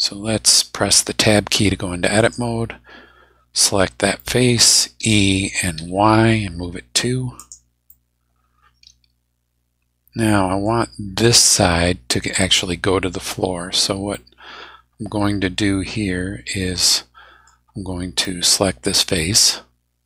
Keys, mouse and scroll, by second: 1.0 Tab, 2.2 right click, 4.2 middle click, 5.0 e, 5.7 y, 7.4 click, 7.9-10.8 middle drag, 14.1-17.6 middle drag, 18.2 middle click, 19.3 click.